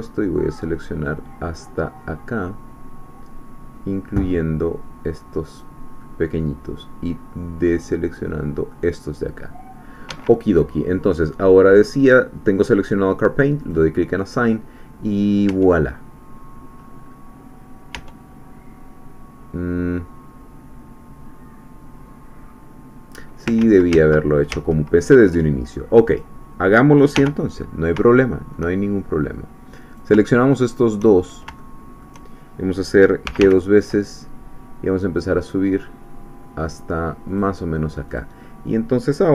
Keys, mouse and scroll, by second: 6.0-8.4 middle drag, 8.7-10.1 middle drag, 10.1 Escape, 13.6 click, 15.5 Tab, 16.0-16.6 scroll down 1, 16.8-17.3 scroll up 2, 17.3 click, 17.6 scroll down 2, 18.0 Tab, 23.6 ctrl+z, 26.1 click, 27.1 1, 28.1 shift+middle click, 28.8-29.2 shift+scroll up 3, 29.9 shift+click, 30.7 shift+click, 31.1-31.4 shift+scroll down 2, 31.6 shift+middle click, 33.2 g, 37.3 click, 38.2 click.